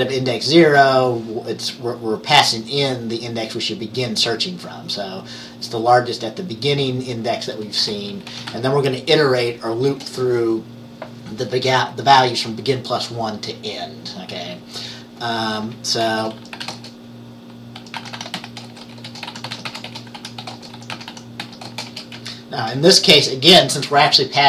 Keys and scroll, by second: 0.0-0.7 typing, 7.9 Return, 8.2-10.0 typing, 16.5-22.9 typing.